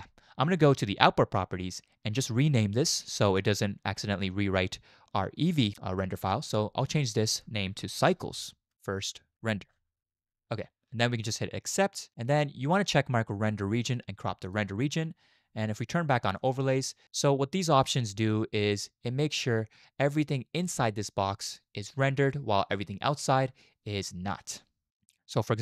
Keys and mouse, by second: 1.0 click, 2.8 click, 13.3 click, 14.4 click, 16.4 click.